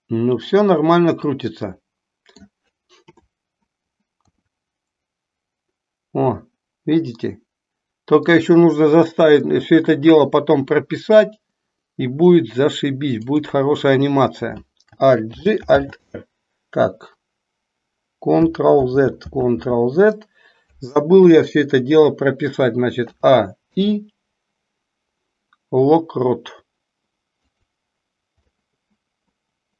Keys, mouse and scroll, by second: 3.0 KP_7, 4.1 r, 15.3 alt+g, 15.9 alt+r, 18.9 ctrl+z, 19.5 ctrl+z, 21.1 KP_3, 23.1 a, 23.6 i, 28.5-29.7 middle drag.